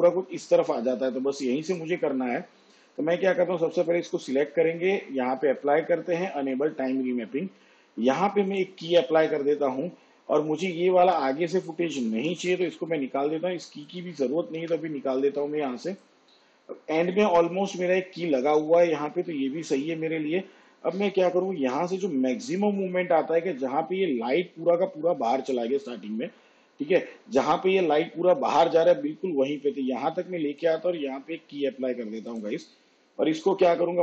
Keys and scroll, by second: 12.2 alt+[, 14.5 Delete.